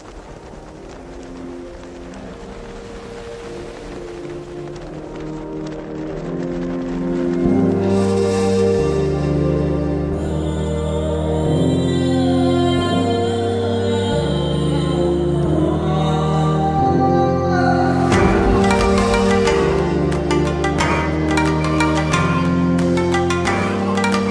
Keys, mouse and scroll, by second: 7.2 click, 10.2 ctrl+t, 11.9-13.7 drag, 17.0-17.6 shift+click, 20.0-21.6 shift+drag, 21.6-23.3 shift+drag.